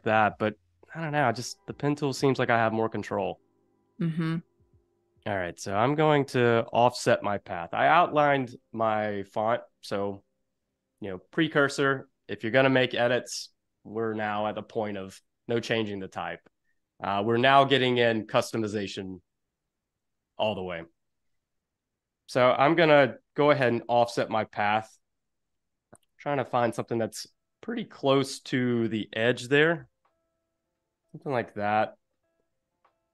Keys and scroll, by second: 22.0 Up, 22.5 Down, 25.2 Delete, 26.0 0, 29.7 5.